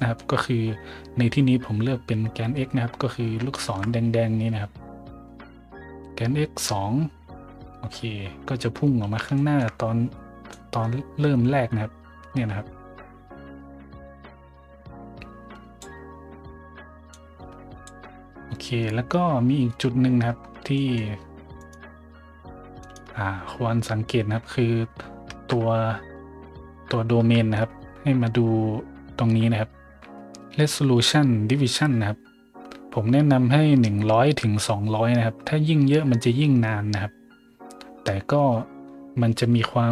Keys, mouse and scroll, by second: 0.0 scroll up 1, 3.0 middle drag, 3.5 shift+middle drag, 7.8 middle click, 9.3 shift+middle drag, 9.9 middle click, 10.0 middle click, 10.5-15.8 drag, 15.4 right click, 17.1 click, 17.1 right click, 20.4 middle click, 20.7 middle drag, 21.6 right click, 22.8 right click, 25.3 Tab, 27.1 Tab, 28.5 middle click, 28.5 scroll down 2.